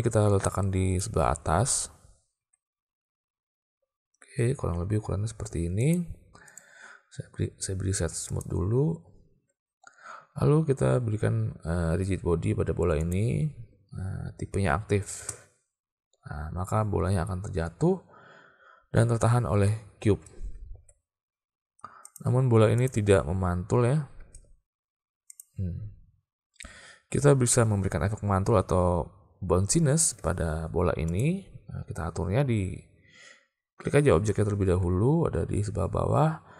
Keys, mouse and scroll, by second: 2.5 s, 8.5 click, 13.0 click, 15.2 space, 20.2 space, 20.8 alt+a, 22.8 click, 24.3 space, 25.3 click, 31.2 click.